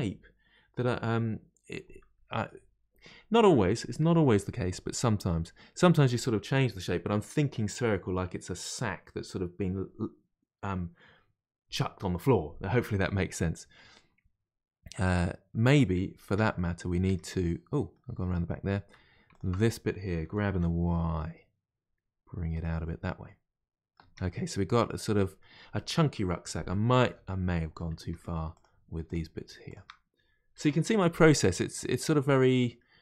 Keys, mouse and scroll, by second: 2.3-8.0 middle drag, 13.3-16.3 middle drag, 16.3 Tab, 16.6 middle click, 17.1 Tab, 17.3-19.3 middle drag, 19.3 alt+click, 20.3 g, 22.8-24.0 middle drag, 24.0 Tab, 24.3-27.3 middle drag, 27.3-28.1 scroll up 2, 28.1 Tab, 28.5 click, 29.0 shift+click, 29.6 shift+click, 30.5 g, 32.6-33.0 middle drag.